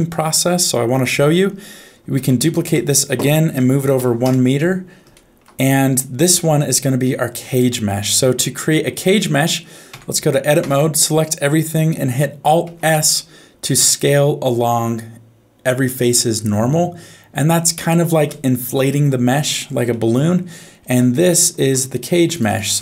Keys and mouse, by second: 2.1 shift+d, 5.1 shift+middle click, 6.0 middle click, 7.0 shift+middle click, 8.4 middle click, 9.9 Tab, 10.6 a, 12.6 alt+s, 19.9 middle click, 20.9 Tab, 21.3 shift+middle click, 22.3 click, 22.5-22.8 drag.